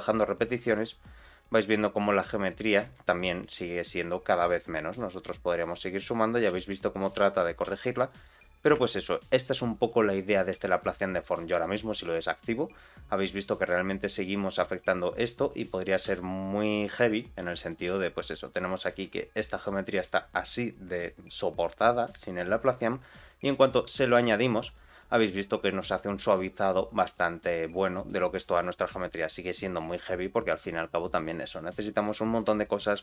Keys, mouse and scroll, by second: 0.0 click, 0.4 click, 0.8 click, 2.2 click, 2.7 z, 4.5 click, 4.9 click, 5.4 click, 5.8 click, 6.5 z, 7.0 middle click, 7.6 z, 8.0 middle click, 8.4-8.7 scroll up 2, 8.7 shift+middle click, 9.2 middle click, 9.5-10.2 scroll down 2, 10.2 click, 10.7-11.0 scroll up 1, 11.0 click, 12.3 click, 12.9-13.2 scroll down 1, 13.2 middle click, 14.3 click, 14.6 g, 15.7 click, 16.0 g, 17.6 click, 17.9 g, 18.7 middle click, 19.1 scroll up 1, 19.4 middle click, 19.9 click, 20.2-21.1 scroll down 2, 23.6 click, 24.3-24.6 scroll up 1, 24.6 click, 24.9-27.5 middle drag, 28.0 middle click, 28.9 shift+middle click, 29.7 click, 30.0 middle click, 30.4 r, 32.2 scroll up 1, 32.5 shift+middle click.